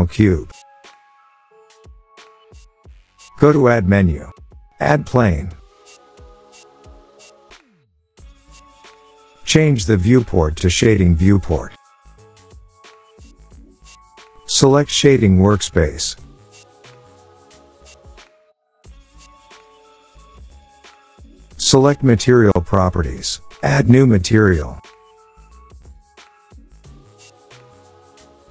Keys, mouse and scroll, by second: 0.6 Delete, 3.6 click, 4.2 click, 4.8 click, 6.2-7.4 scroll, 9.8 scroll, 10.2 click, 14.4 click, 15.2 click, 16.3-16.8 scroll, 17.6 click, 18.4 click, 18.5-19.6 scroll, 19.6 click, 22.6 click, 25.0 click.